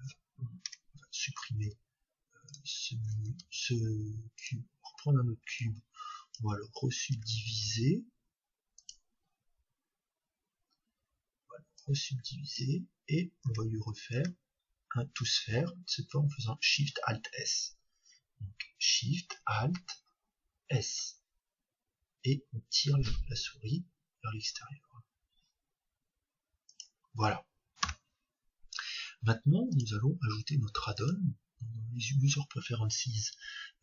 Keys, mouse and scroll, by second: 0.7 Tab, 1.6 x, 3.2 shift+a, 5.6-7.5 drag, 7.1 Tab, 7.5 w, 11.7-13.6 drag, 13.6 Tab, 26.8-28.7 drag, 29.7-31.7 drag.